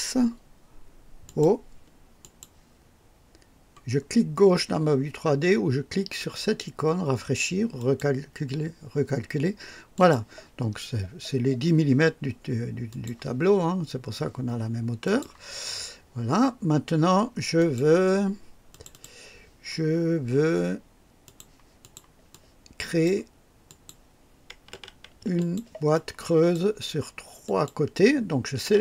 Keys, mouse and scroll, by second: 1.2 click, 2.2 click, 7.7 click, 9.9 click, 12.8 click, 15.0 click, 17.5 click, 18.7 click, 21.2 click, 21.8 click, 22.3-23.2 drag, 23.6 click, 25.3 ctrl+click, 25.9-26.7 ctrl+drag, 27.4 ctrl+click.